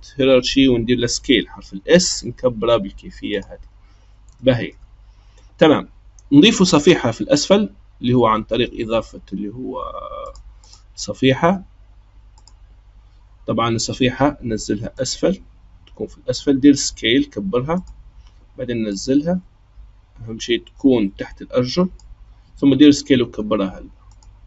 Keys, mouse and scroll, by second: 1.5 s, 4.4-7.3 shift+middle drag, 7.3-10.3 drag, 10.6-13.7 drag, 14.9 click, 16.6 s, 18.9 click, 22.4 s.